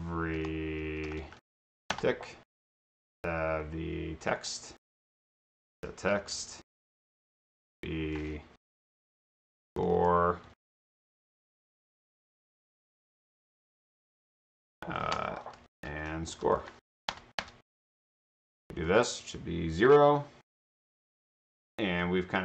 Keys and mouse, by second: 0.0-2.0 typing, 4.2 click, 5.5-7.0 typing, 7.0 Return, 9.1-10.9 typing, 12.8 shift+space, 15.2-17.2 typing, 18.9 click.